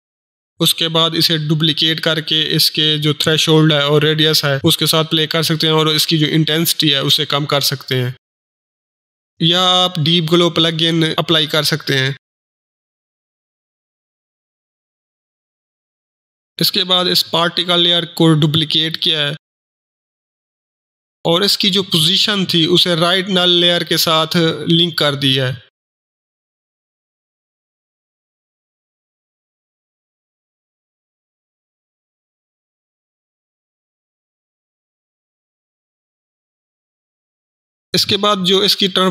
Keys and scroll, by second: 0.5 ctrl+d, 4.9-5.6 typing, 8.5 typing, 10.8 ctrl+Delete, 11.1 ctrl+space, 11.2 ctrl+d, 11.4 ctrl+e, 11.5 ctrl+p, 11.7 ctrl+Return, 13.6 ctrl+shift+h, 16.7 ctrl+d.